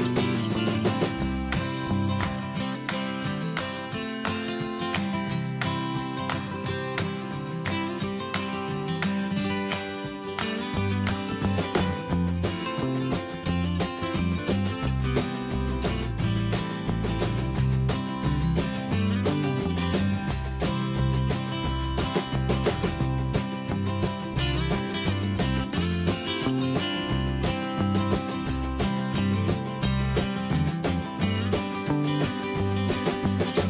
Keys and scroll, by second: 17.6 ctrl+e.